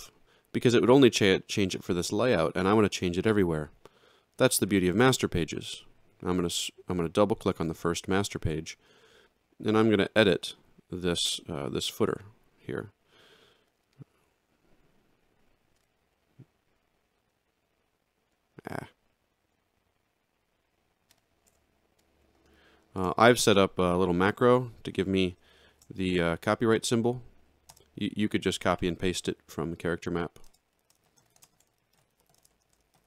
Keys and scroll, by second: 10.5 z, 21.5 BackSpace, 23.0 space, 25.8 ctrl+alt+shift+c, 27.7 space, 28.6 2, 30.5-33.0 typing.